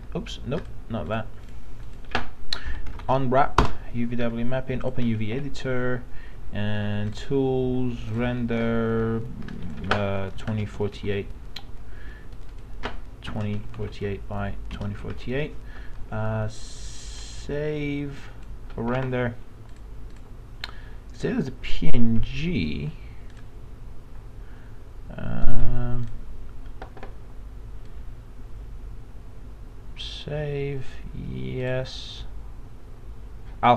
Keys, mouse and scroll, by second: 0.5 click, 2.4-3.5 typing, 10.3 KP_2, 13.3 KP_2, 14.7 KP_4.